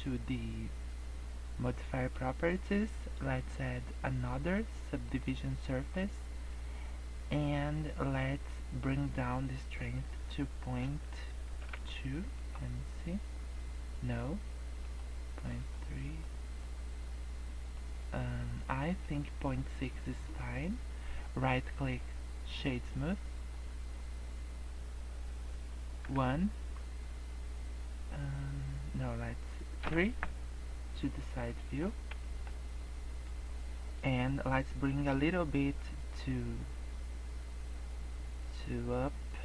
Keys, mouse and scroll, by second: 1.9 click, 3.3 click, 5.6 middle click, 8.3 click, 12.9 middle click, 14.8 click, 15.3 click, 15.6 click, 16.0 click, 16.6 middle click, 17.9 middle click, 19.0 middle click, 19.6 middle click, 21.4 right click, 22.8 middle click, 26.0 KP_1, 27.4-28.0 scroll up 2, 28.0 scroll down 1, 28.3 scroll up 2, 28.6 scroll down 2, 29.7 KP_3, 31.4 shift+middle click, 31.8 scroll up 2, 32.2 shift+middle click.